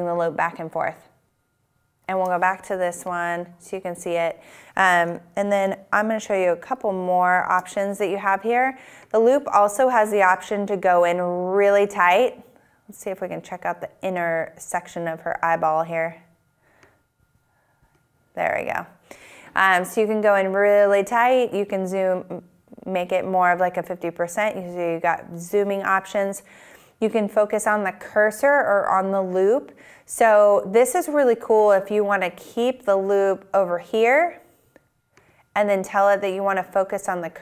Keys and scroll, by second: 1.2 shift+super+`, 7.0 shift+super+`.